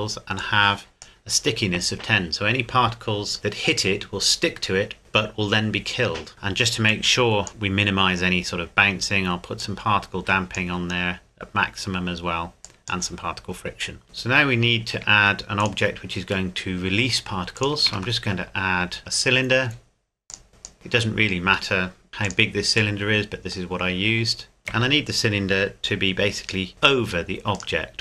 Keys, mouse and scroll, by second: 6.9 click, 9.6 click, 12.6 click, 14.0-15.0 scroll down 1, 15.6 shift+click, 16.5 middle click, 17.5 click, 17.9 shift+a, 20.3 click, 20.7-21.5 scroll up 1, 21.5 s, 22.1 z, 22.3 click, 23.0 middle click, 24.6 scroll down 1, 24.7 KP_7, 26.7 g, 27.5 click.